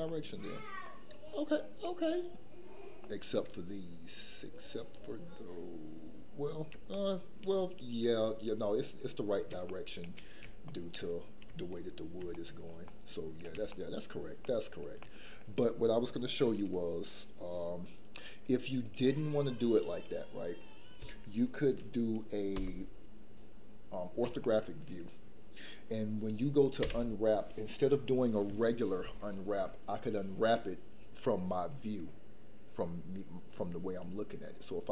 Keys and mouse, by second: 0.0 shift+middle click, 0.8 shift+middle click, 1.7 shift+middle click, 3.0 shift+middle click, 6.9 shift+middle click, 9.7 shift+middle click, 10.6 shift+middle click, 12.2 shift+middle click, 12.8 middle click, 13.7 shift+middle click, 14.4 shift+middle click, 14.9 middle click, 19.0 click, 22.5 KP_7, 24.4 shift+middle click, 26.8 u.